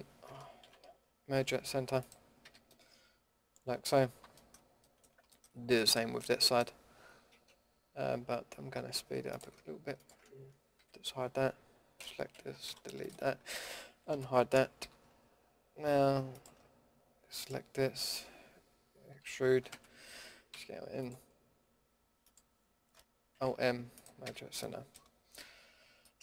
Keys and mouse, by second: 0.6 ctrl+z, 1.3 alt+m, 2.4 a, 9.2-10.7 right drag, 10.7 h, 11.0 right click, 11.9 l, 12.6 Delete, 14.1 alt+h, 14.8 a, 19.2 e, 20.5 s, 23.3 alt+m, 24.2 a, 25.6 Tab.